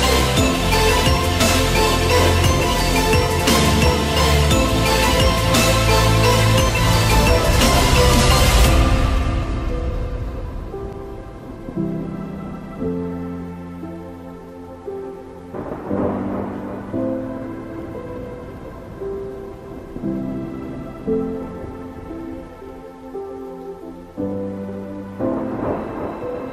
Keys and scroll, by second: 6.4 ctrl+z, 9.2 Escape, 21.6 Return.